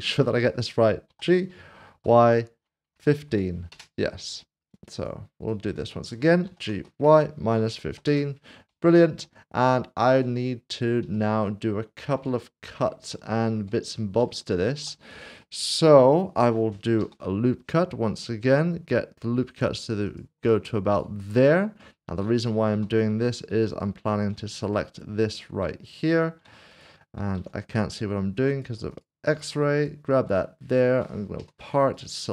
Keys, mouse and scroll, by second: 1.1-1.9 typing, 2.9-3.3 typing, 3.7 Return, 4.8 double click, 5.5 click, 6.4-7.8 typing, 8.0 Return, 9.0 middle click, 9.7 shift+middle click, 10.3 middle click, 12.6 middle click, 13.1 shift+middle click, 13.9 scroll down 1, 14.3 shift+middle click, 17.0 ctrl+r, 17.6-20.1 scroll up 1, 20.1 click, 20.9 click, 21.8 middle click, 23.3 click, 23.4 click, 23.7 alt+click, 24.7 middle click, 26.7 click, 27.7 alt+z, 27.9 scroll up 1, 28.5 click, 28.9 alt+click, 29.8 shift+click, 30.6 middle click, 31.4 p, 31.9 click.